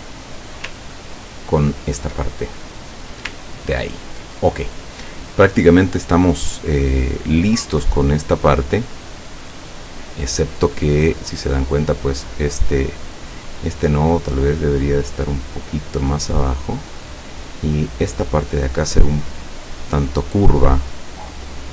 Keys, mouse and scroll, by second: 1.0-1.4 ctrl+scroll down 2, 1.6-2.1 ctrl+scroll down 4, 2.4 ctrl+click, 3.0 click, 3.6 ctrl+scroll down 2, 11.7 right click, 12.4 click, 12.8 click, 13.9-17.4 drag, 18.0-21.7 drag.